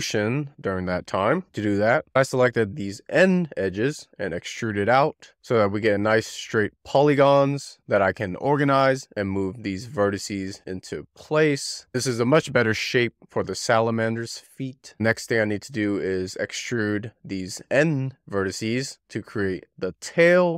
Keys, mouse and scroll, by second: 0.1 ctrl+r, 0.9-2.3 shift+middle drag, 2.3 2, 2.4 click, 2.9 d, 3.8 shift+middle click, 4.0 click, 4.4 d, 5.4 shift+middle click, 5.7 ctrl+r, 5.9 shift+middle click, 6.1 ctrl+r, 6.4 1, 6.5 shift+middle click, 6.7-7.1 scroll up 2, 7.1 ctrl+r, 7.5 ctrl+r, 7.7 scroll up 1, 7.8 click, 8.1 shift+middle click, 8.3-8.8 scroll down 3, 9.2 shift+middle click, 9.4 scroll up 6, 9.7 click, 10.2 x, 10.7-11.2 click, 11.0 click, 11.1 click, 11.4 scroll down 3, 11.7 click, 11.9 scroll up 5, 12.1 click, 12.3 click, 12.3 click, 12.5 shift+middle click, 12.6 click, 13.0 click, 13.5 click, 13.6 Left, 13.7 Left, 13.9 Left, 14.5 Left, 14.6 scroll down 3, 14.8-15.7 drag, 15.7 d, 20.2 ctrl+r.